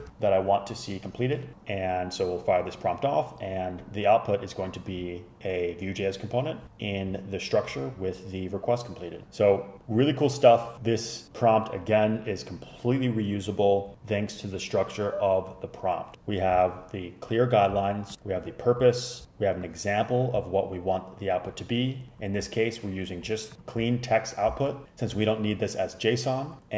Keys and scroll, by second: 0.0 super+Return.